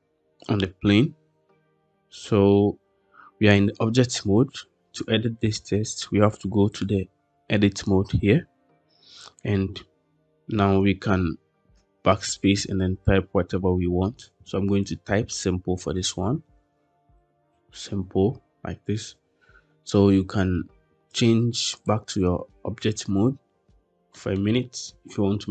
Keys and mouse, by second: 11.5 BackSpace, 11.7 BackSpace, 11.9 BackSpace, 12.1 BackSpace, 15.7-17.2 typing, 21.1-21.7 drag, 24.0 middle drag.